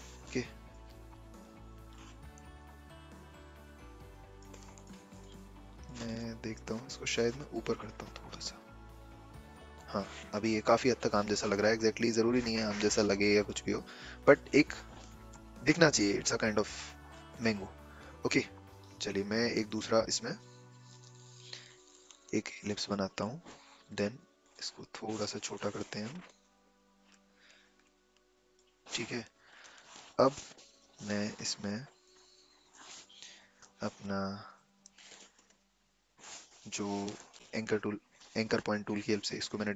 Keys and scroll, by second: 25.5 v, 33.7 a, 34.7 a, 34.9 shift+c, 37.2 p, 37.3 shift+c.